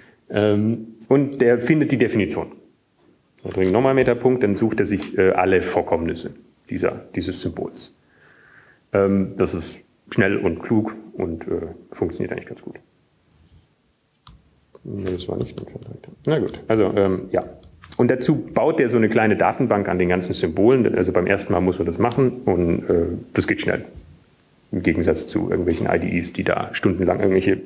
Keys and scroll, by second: 7.7 alt+., 20.9 alt+shift+Up, 21.9 ctrl+g.